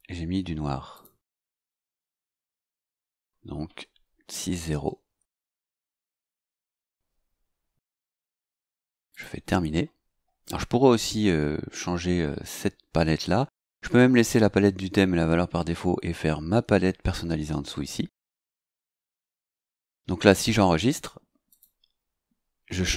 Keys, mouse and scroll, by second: 0.9 click, 1.8 click, 4.6 KP_0, 8.2 click, 9.1 click, 19.1 click, 21.5 click.